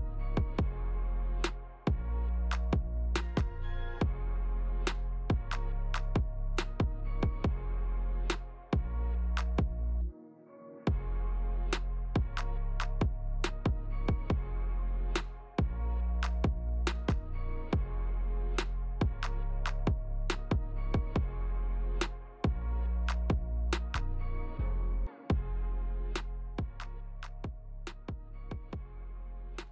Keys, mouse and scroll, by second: 0.0 shift+click, 1.0 ctrl+z, 1.4 shift+click, 1.7 shift+click, 2.1 shift+click, 2.3 shift+click, 2.6 shift+click, 3.0 f, 3.4 ctrl+z, 3.6 click, 4.3 ctrl+z, 4.7 scroll down 2, 5.0 middle click, 6.3 click, 7.8 click, 9.0 r, 13.4 g, 16.0 g, 18.8 middle click, 22.0 click, 22.9 `, 23.4 Tab, 24.0 click, 25.2 s, 27.4 middle click.